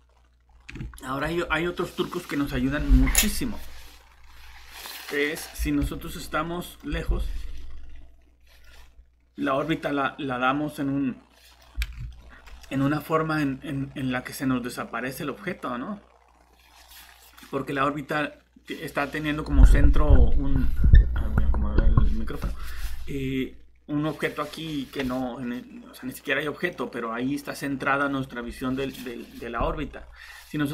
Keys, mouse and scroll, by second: 0.1-0.4 scroll up 1, 0.5 scroll down 1, 0.9 middle click, 6.3-6.9 typing, 8.6 scroll up 1, 9.7 middle click, 29.9 scroll down 1.